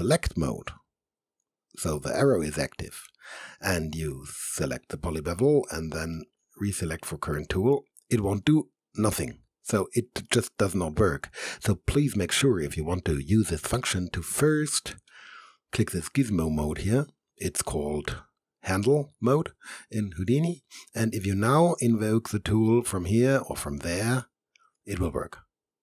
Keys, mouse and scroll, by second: 0.9 click, 6.2-8.1 right drag, 15.1 click, 21.9-24.1 right drag.